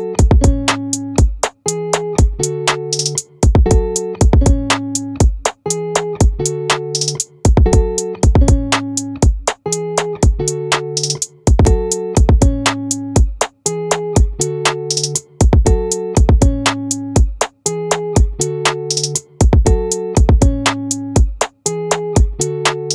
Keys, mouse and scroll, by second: 0.5 middle click, 2.7-4.3 right drag, 4.8-7.9 right drag, 8.4-9.8 middle drag, 9.9-12.0 drag, 16.8-18.6 middle drag, 19.0 middle click, 19.1-22.6 drag.